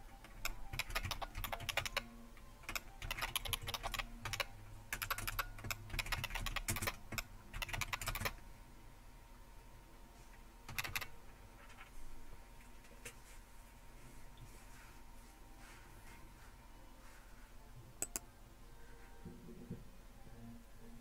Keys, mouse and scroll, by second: 0.7-8.1 typing, 5.0 Return, 5.3 Return, 10.7 typing, 18.0-19.1 drag, 19.3 click.